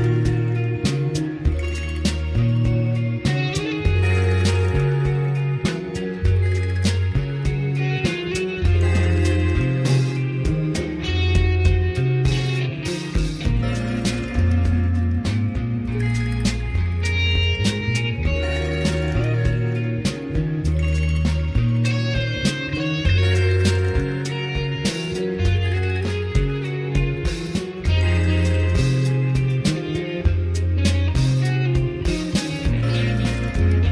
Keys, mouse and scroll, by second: 0.0-2.5 drag, 10.3-12.8 drag, 13.0-13.6 scroll down 2, 13.6-14.4 scroll up 2, 14.4 g, 17.2 click, 18.2-19.3 middle drag, 19.4-20.1 scroll down 2, 20.1 middle click, 21.0 s, 22.2 click, 23.0 g, 25.8 click, 26.4 g, 28.0 right click, 28.2 s, 30.2 middle click, 30.7 s, 33.6 click.